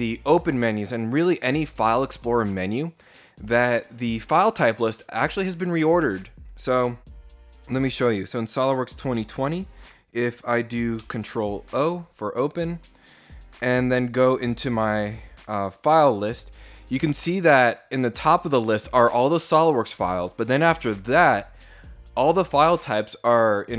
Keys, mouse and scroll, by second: 7.6 click, 10.6 ctrl+o, 15.1 click.